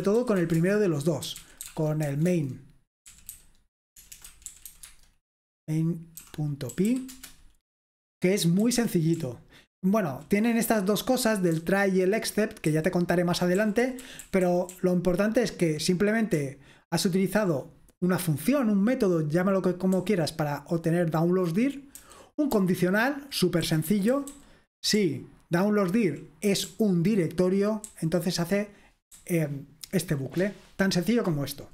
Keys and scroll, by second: 0.0-5.2 typing, 6.5-7.4 typing, 8.5-18.9 typing, 20.0 h, 20.6 h, 20.7 h, 22.0-26.0 typing, 27.8 typing, 28.9-30.2 typing.